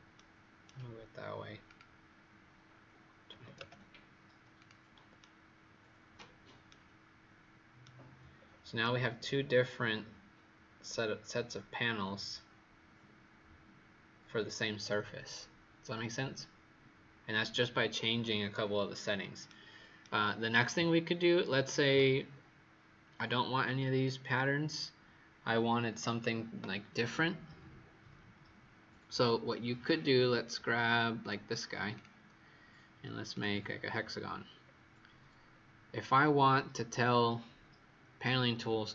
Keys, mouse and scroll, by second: 0.1 right click, 1.6 click, 3.2 KP_2, 3.3 KP_0, 3.5 KP_Enter, 4.5 click, 5.1 right click, 6.6 right click, 8.3-8.7 scroll down 2, 8.7 right click, 20.0 right click, 23.3-26.9 scroll up 2, 31.1 click, 34.6-35.4 scroll down 1, 35.4-37.6 scroll up 1.